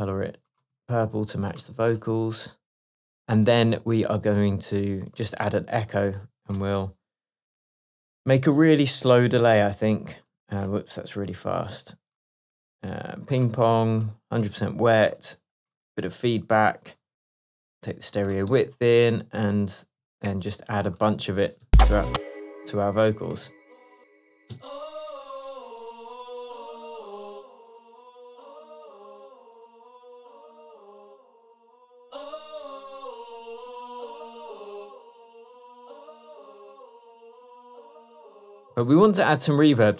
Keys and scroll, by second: 19.4 Tab, 20.1 Tab, 21.7 space, 24.6 space, 31.5 Tab, 38.8 space.